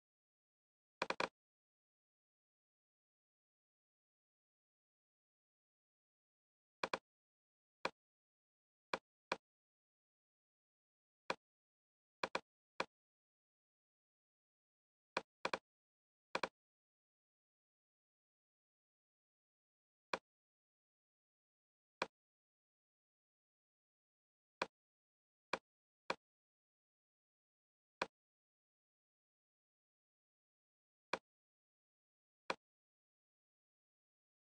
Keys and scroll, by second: 3.1 Tab, 4.7 Return.